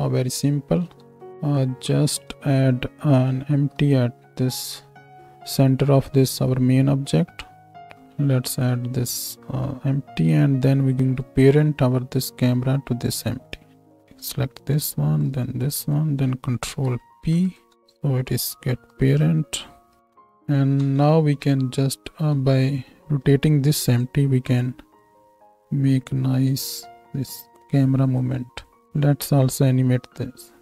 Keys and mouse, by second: 0.8 z, 1.2 z, 3.5 shift+a, 4.0-8.0 middle drag, 9.3-11.2 shift+middle drag, 11.2 click, 11.5-14.1 middle drag, 14.1-14.9 drag, 14.9 ctrl+middle click, 15.3 ctrl+click, 15.6-18.8 ctrl+middle drag, 16.7 ctrl+p, 18.8 click, 19.0 middle click, 19.1-21.3 drag, 20.8 KP_0, 22.1 z, 24.0-25.0 middle drag, 28.7-30.6 drag.